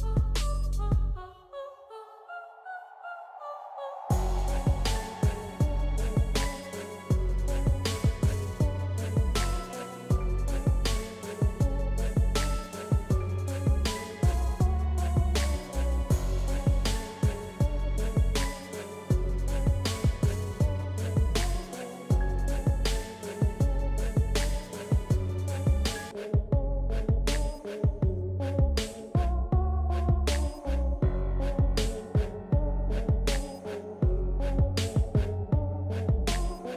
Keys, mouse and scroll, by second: 2.2-4.4 drag, 5.4-15.4 drag, 7.0 typing, 15.4-22.8 drag, 24.4 ctrl+z, 26.2 ctrl+z, 27.9-36.7 drag.